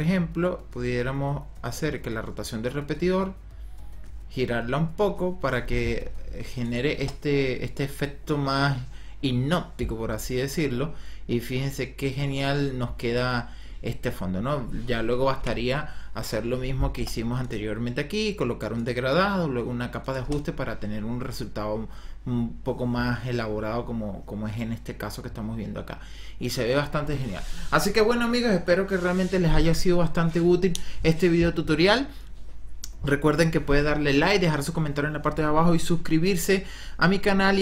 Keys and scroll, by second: 6.9 KP_0, 15.3 l, 16.9 KP_0, 20.1 KP_0.